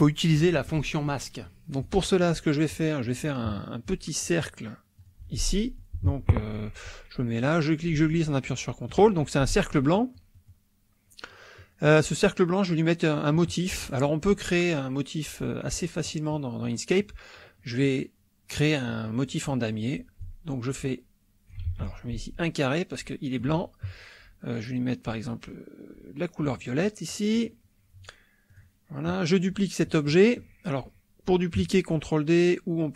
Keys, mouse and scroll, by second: 1.4 KP_Subtract, 2.7 middle click, 4.2 click, 5.0 click, 5.5 click, 6.3 click, 7.4-9.0 drag, 9.9 click, 11.6 click, 15.6 click, 16.0 click, 16.6 click, 17.6 click, 20.2-21.7 ctrl+drag, 21.7 ctrl+z, 22.1-23.6 ctrl+drag, 26.5 click, 27.1 middle click, 28.5 click.